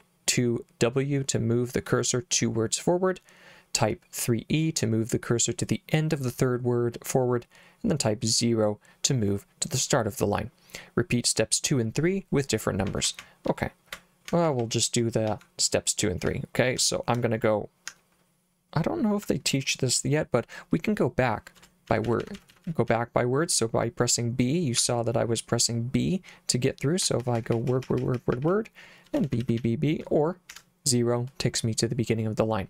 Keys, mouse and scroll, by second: 12.9 k, 13.1 k, 13.2 k, 14.3-16.8 typing, 17.9 h, 21.6-22.9 typing, 24.8 j, 27.1-30.5 typing.